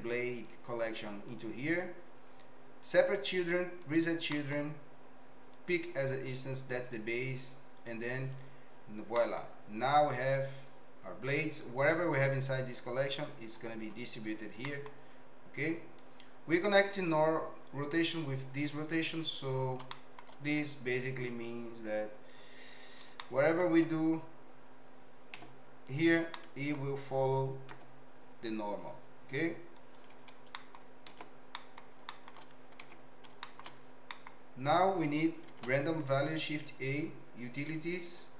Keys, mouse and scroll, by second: 1.3 click, 2.8 click, 3.9 click, 4.3 middle click, 5.5 click, 6.9 click, 9.1 middle click, 10.1 click, 14.6 middle click, 15.6 click, 17.0-18.1 drag, 19.9-20.2 shift+middle drag, 20.6 click, 21.3 Tab, 23.2 shift+middle click, 25.4 2, 25.8 click, 26.3 middle click, 27.7 e, 30.5 middle click, 31.2 ctrl+z, 31.5 middle click, 32.1 shift+middle click, 32.8 Tab, 33.5 shift+middle click, 34.2 middle click, 35.5 shift+a.